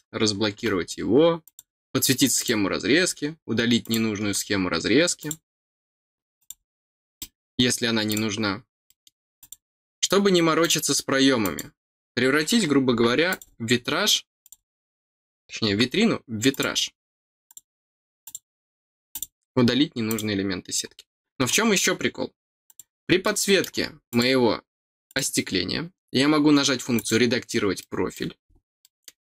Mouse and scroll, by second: 1.4 click, 2.3 click, 3.8 click, 5.1 click, 6.3 click, 7.1 middle click, 8.0 click, 8.8 middle click, 9.3 click, 10.5 click, 11.4 click, 13.2 click, 14.4 click, 16.4 click, 17.4 click, 18.2 click, 19.1 click, 20.0 click, 22.6-24.1 drag, 23.2 middle click, 25.0 click, 26.9 click, 27.7 middle click, 28.1-28.5 scroll down 2, 28.7 middle click.